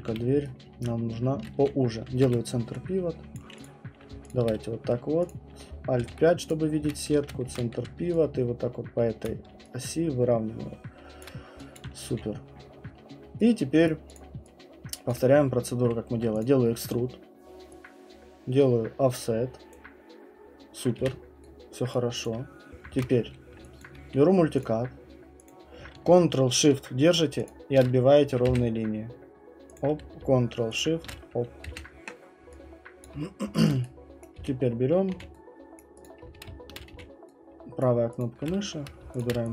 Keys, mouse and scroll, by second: 0.1 r, 0.8 right click, 2.1 ctrl+c, 3.4 click, 3.6 click, 4.3 shift+click, 4.8 shift+click, 5.3 click, 6.0 alt+5, 6.5 click, 6.8 w, 7.4 ctrl+c, 7.8-9.2 typing, 9.2 click, 11.2 alt+click, 12.1 q, 12.6 scroll, 13.8 right click, 14.1 click, 16.3 middle click, 16.4 click, 19.7 click, 21.0 q, 21.9 right click, 22.2 click, 22.9 ctrl+1, 23.2 middle click, 23.8 alt+click, 24.6 click, 25.5 click, 25.8 alt+click, 28.4 ctrl+shift+Return, 29.8 click, 31.6 Return, 33.0 alt+click, 33.6 alt+click, 34.2 right click, 34.4-35.1 typing, 35.8 right click, 36.0 click, 36.2-37.4 typing, 37.8 right click, 38.2 click, 39.2 shift+click.